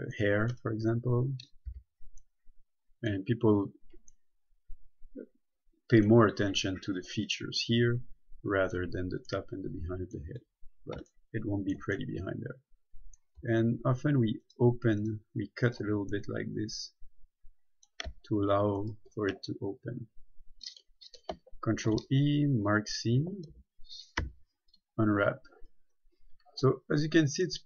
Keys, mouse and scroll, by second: 2.0 b, 2.5 middle click, 10.7 scroll up 1, 11.0-11.3 scroll down 1, 11.4 shift+middle click, 14.6 right click, 16.4 middle click, 19.0 shift+right click, 20.2-20.8 scroll down 1, 22.0 ctrl+e, 22.9 click, 23.4-24.4 typing, 25.0 click, 26.1 scroll down 1, 27.0 scroll up 1.